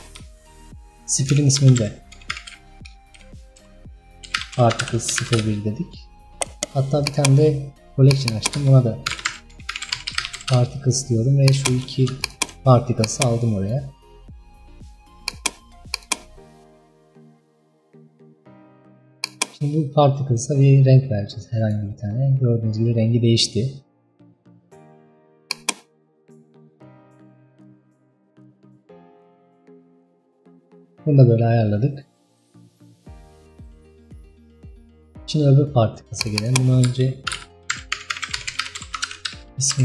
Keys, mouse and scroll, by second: 7.2-8.2 right drag, 8.4-11.5 drag, 12.3 shift+click, 13.7 click, 15.3 click, 16.1 click, 20.4 click, 25.6-36.3 drag, 36.5-39.8 drag.